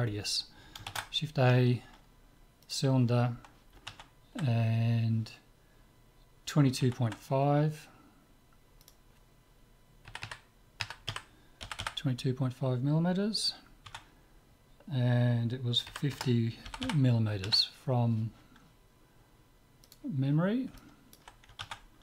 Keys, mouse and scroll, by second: 0.9 shift+a, 8.9-10.5 drag, 10.3 KP_2, 11.8 m, 16.9 m, 20.3-22.0 middle drag.